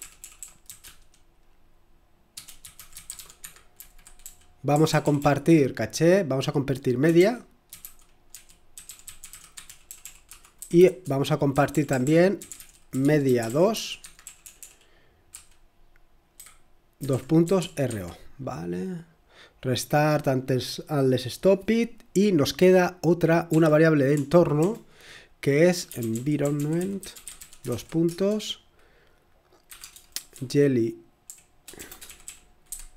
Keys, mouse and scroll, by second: 0.0-0.8 typing, 2.3-5.6 typing, 6.9-18.3 typing, 20.3-21.1 typing, 24.5-28.2 typing, 29.4-32.9 typing.